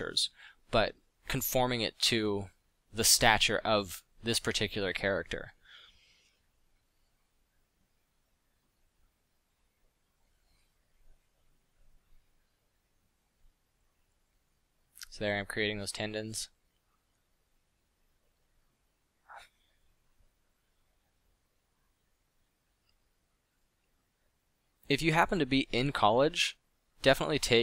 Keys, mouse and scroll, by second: 8.0 f, 24.0 f.